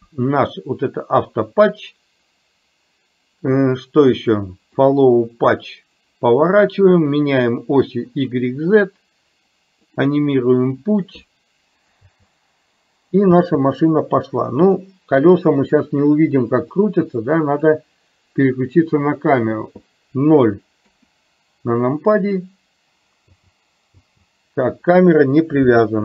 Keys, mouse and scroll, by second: 4.8 click, 10.0 click, 12.1 space, 17.0 click, 19.3 click, 20.9 KP_0, 23.4 space.